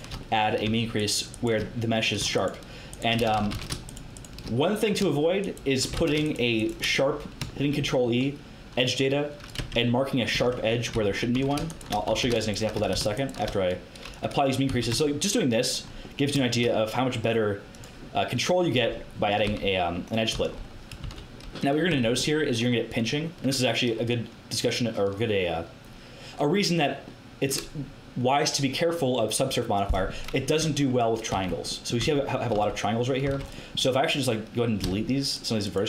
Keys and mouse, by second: 3.3 ctrl+z, 3.4 ctrl+z, 5.9 ctrl+z, 9.5 Tab, 10.3 Tab, 10.9 z, 11.3 a, 12.1 a, 12.8 a, 14.1 click, 14.1 right click, 14.6 z, 14.9 Tab, 15.0 click, 15.0 right click, 17.6-19.0 middle drag, 18.7 Tab, 19.4 z, 20.3 z, 21.0 a, 21.8 Tab, 30.0-31.6 middle drag, 30.5 Tab, 31.2 z, 31.9 z, 32.5 z, 33.2 z.